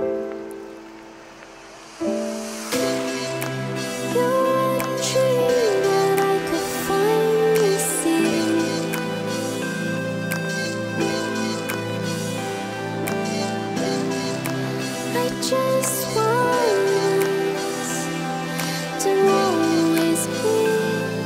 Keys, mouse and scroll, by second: 0.6-1.0 drag, 1.0 middle click, 1.1-2.4 drag, 3.3 middle click, 4.8 middle click, 7.2 z, 8.2-9.9 middle drag, 9.9 right click, 10.7 click, 11.5 Tab, 11.9 a, 12.5-12.9 drag, 13.5 click, 14.5 right click, 15.4 l, 15.9 l, 16.1 l, 17.1 click, 17.8-18.8 middle drag, 19.2 click, 19.4 Tab, 19.4 right click, 20.2 click.